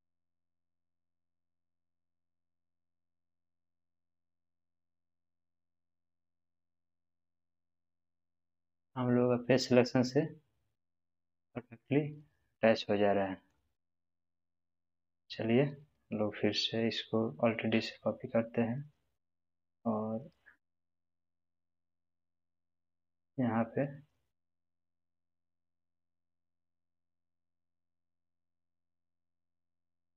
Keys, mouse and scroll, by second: 3.3 g, 3.3 click, 4.3-7.1 middle drag, 7.1-8.0 scroll up 1, 8.7-11.5 middle drag, 11.9-12.4 scroll down 1, 13.2 middle click, 13.7-14.6 scroll down 1, 14.6 click, 17.6 alt+d, 27.6 click, 28.8 g.